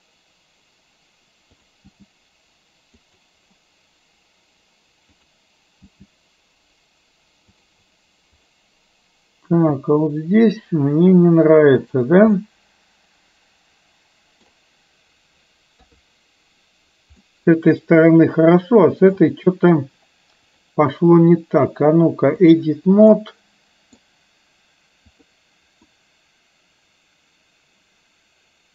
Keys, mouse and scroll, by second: 2.0 g, 5.2 click, 6.0 g, 8.5 click, 9.6 g, 12.5-14.7 middle drag, 15.8 KP_3, 17.3-19.3 middle drag, 20.6-22.8 drag, 23.2 middle click, 25.1 click, 26.0-28.7 middle drag.